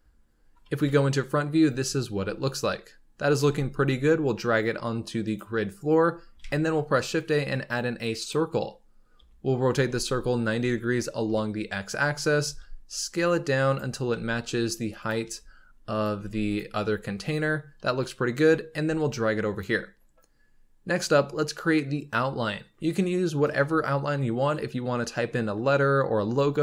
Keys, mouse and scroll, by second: 0.7 KP_1, 1.6 z, 2.0-3.0 scroll up 3, 3.0 scroll down 1, 3.3 g, 8.6-9.1 scroll up 3, 9.1 r, 12.0-12.4 scroll down 3, 12.4 s, 13.8 scroll up 4, 14.0 g, 15.2 s, 16.0 g, 16.9-17.7 scroll down 5, 17.7 KP_7, 18.8 g, 19.7-20.3 scroll down 3, 20.3-21.5 scroll up 2.